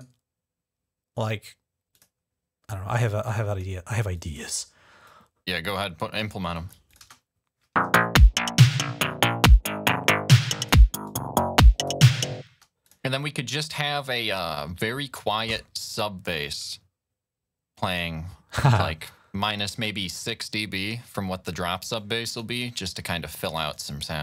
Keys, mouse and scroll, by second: 1.7 click, 3.1 click, 4.0 click, 4.9-6.0 drag, 6.4 click, 6.7 click, 6.9 space, 7.0 click, 8.5-10.0 drag, 10.2 click, 10.9 click, 12.3 space, 12.7 click, 13.4 click, 17.7 click, 18.9 click, 19.9 click, 21.8 click, 22.5-24.2 typing, 23.5 click.